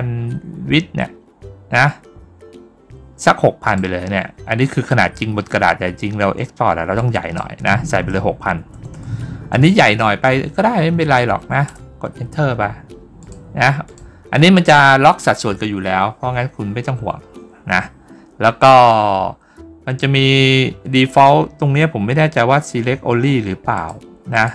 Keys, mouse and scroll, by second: 3.5 click, 6.8 click, 13.1 click, 13.7 click, 23.6 click, 24.2 click.